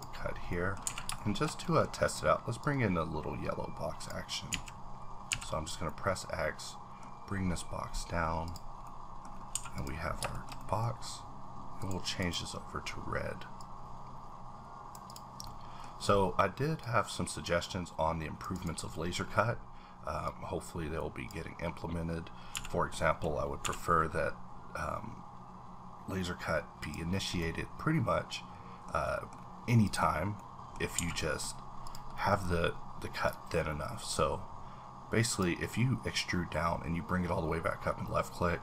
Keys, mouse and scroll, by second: 0.2 scroll down 2, 0.5 middle click, 0.8 a, 1.2 shift+middle click, 1.7 scroll down 1, 2.1 click, 2.6-5.9 drag, 4.5 z, 5.3 x, 5.9-8.8 middle drag, 8.4 click, 8.8 middle click, 9.3 scroll up 3, 9.5 a, 9.7 click, 10.1 scroll down 2, 10.3 shift+middle click, 11.8 click, 12.2 click, 13.6-15.4 drag, 15.4-16.8 middle drag, 16.0-16.8 scroll up 1, 16.8-18.9 drag, 18.9 middle click, 19.2-20.2 scroll up 2, 20.2-23.6 drag, 22.5 v, 23.6 y, 24.6-26.4 scroll up 1, 26.8 click, 27.1-27.4 scroll down 3, 27.4 middle click, 29.0 scroll down 1, 29.2 double middle click, 29.3 scroll up 1, 29.3 double middle click, 29.8 click, 30.4 middle click, 30.9 scroll down 1, 31.0 a, 31.2 middle click, 31.4-31.8 scroll up 2, 31.8 click, 32.1 middle click, 32.3-33.2 scroll up 4, 33.2-38.6 drag.